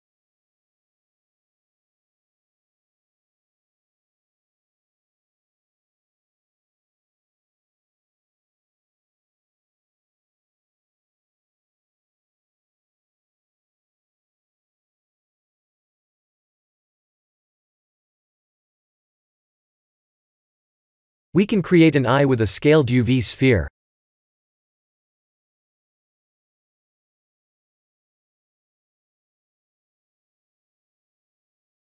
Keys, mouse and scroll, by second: 0.2 click, 6.0 middle click, 9.1 click, 9.6 Tab, 10.1 middle click, 11.3 click, 14.2 click, 14.7 scroll down 3, 15.9 click, 15.9-16.3 scroll down 3, 16.3 click, 17.0 middle click, 18.6 click, 18.9 middle click, 19.7 shift+z, 20.0 middle click, 21.1 KP_1, 22.0 click, 22.4 shift+a, 31.6 middle click.